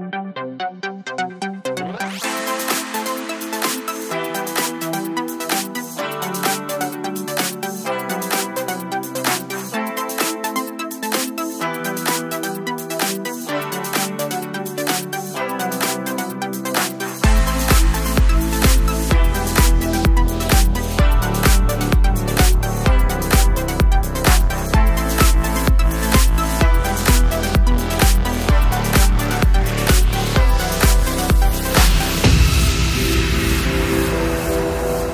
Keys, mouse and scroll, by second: 5.2 Down, 8.3 click, 9.5 click, 16.0 Right, 17.2-21.8 drag, 21.8-23.7 alt+drag, 24.5-26.3 drag, 26.3-28.9 drag, 33.6 click.